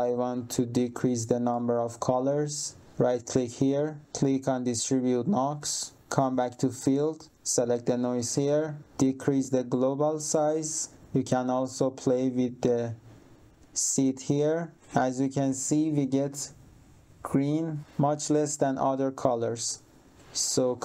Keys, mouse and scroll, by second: 1.5 click, 2.8 right click, 5.5 click, 7.7 click, 8.8 click, 11.2 click, 13.1 click, 14.4 click.